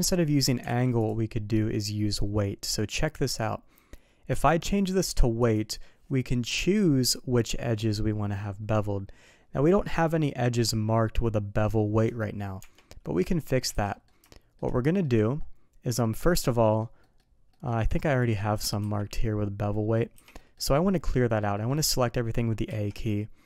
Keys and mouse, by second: 0.9 alt+v, 4.3-5.5 drag, 12.6 Tab, 13.0 middle click, 13.7 alt+a, 13.9 middle click, 14.3 shift+middle drag, 14.8 middle click, 16.0 middle click, 16.6 middle drag, 17.0 middle drag, 17.5 middle drag, 18.2 click, 20.4 middle click, 21.5 middle click, 22.7 a.